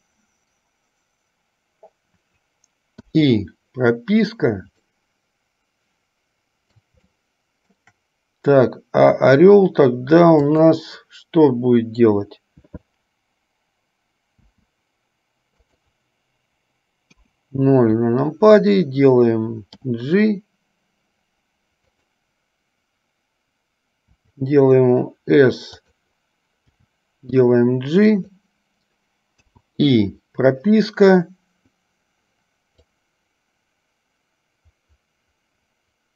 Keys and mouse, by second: 3.2 i, 5.2-6.7 middle drag, 7.4-8.1 shift+middle drag, 10.7 click, 14.6 g, 17.3 KP_0, 20.1 g, 24.2 s, 26.9 g, 29.7 i, 33.1-36.1 drag.